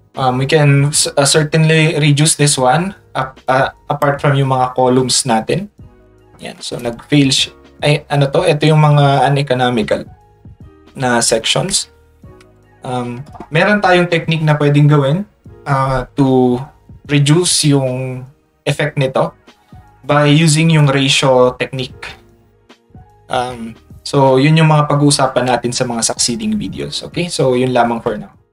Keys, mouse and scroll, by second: 3.5 click, 9.2 click, 21.9 scroll up 1, 24.3 click, 27.5 click, 28.1 Tab.